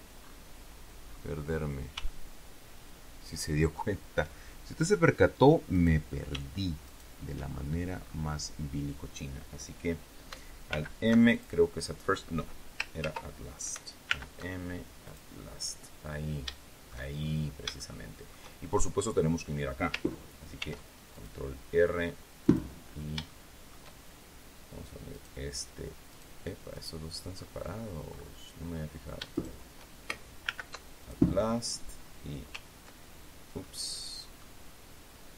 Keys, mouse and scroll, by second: 1.0 scroll up 2, 1.9-3.8 shift+middle drag, 5.6 right click, 6.7 shift+right click, 7.4-8.2 shift+scroll down 4, 10.6 alt+m, 11.2 alt+click, 12.9 ctrl+z, 14.0 alt+m, 15.0 click, 15.7-16.1 scroll down 2, 16.4 shift+click, 17.1-17.6 shift+scroll up 4, 17.7 shift+middle click, 20.5 ctrl+r, 21.0 ctrl+click, 22.3 click, 22.7-23.1 scroll up 1, 23.2 shift+middle click, 25.0 right click, 26.0 right click, 26.6 right click, 27.2-27.5 scroll down 2, 28.0-28.3 scroll up 2, 29.2 shift+right click, 30.4 alt+m, 30.9 alt+click, 33.5 middle click, 34.2 scroll up 2.